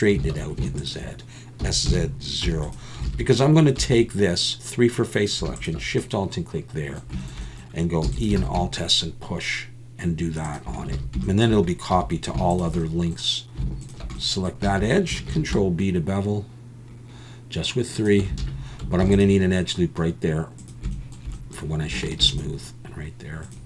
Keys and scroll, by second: 0.2 alt+a, 1.6 s, 1.9 z, 2.6 0, 3.1 alt+a, 3.8 3, 8.0 e, 8.4 alt+s, 11.0 alt+a, 11.9 2, 15.3 ctrl+b, 18.4 alt+a, 19.0 ctrl+r, 22.2 ctrl+r.